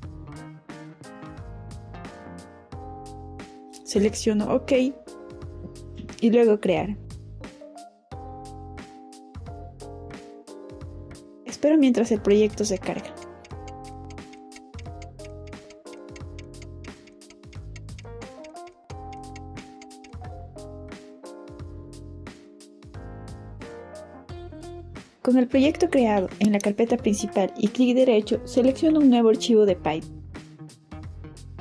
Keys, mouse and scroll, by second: 3.2 click, 4.7 click, 6.6 click, 8.1 click, 24.6 click, 25.6 click, 26.7 right click, 30.1 click.